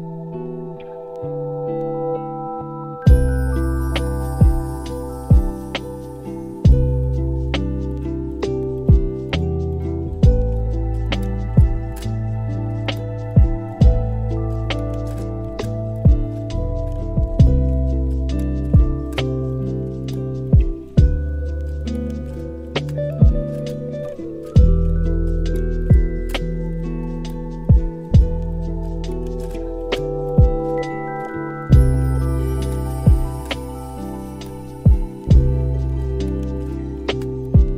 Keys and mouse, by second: 2.3 click, 2.6 x, 3.0-4.1 middle drag, 4.3 shift+middle drag, 4.7 middle drag, 5.6 shift+middle drag, 8.1 middle drag, 9.6 middle click, 10.6 middle click, 11.2 click, 11.5 click, 14.0 click, 15.1 click, 15.5-15.8 middle drag, 15.8 a, 15.9 a, 16.3-16.8 middle drag, 17.1 shift+middle drag, 17.3-18.1 middle drag, 19.1 click, 19.9 z, 21.3-21.8 middle drag, 22.1 shift+middle drag, 22.5 middle click, 23.6-24.3 middle drag, 25.1 middle drag, 25.5 shift+middle drag, 27.0 middle drag, 28.1 click, 28.9-30.7 shift+drag, 31.0 shift+a, 35.2 middle click, 35.7 x, 36.3 shift+a.